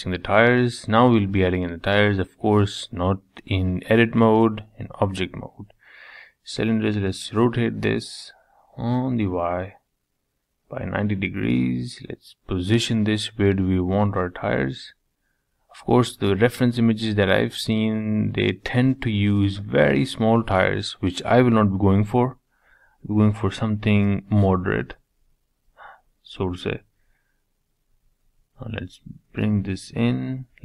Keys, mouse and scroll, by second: 0.1-0.6 scroll up 1, 0.6-1.3 shift+middle drag, 1.3 shift+a, 4.6 g, 6.0 r, 7.6-9.0 middle drag, 9.0 KP_3, 10.0 g, 11.4 s, 13.2 g, 14.7 g, 19.8-21.1 middle drag, 21.1-21.8 scroll down 1, 22.1 s, 24.6 middle click, 25.4 KP_3, 26.2 middle click, 27.2 g.